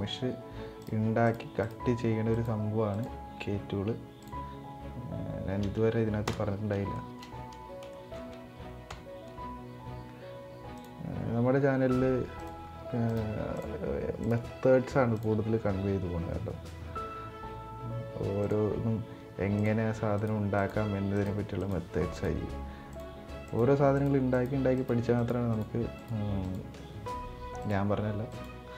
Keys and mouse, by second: 6.6 shift+middle click, 7.6 shift+middle click, 8.6 k.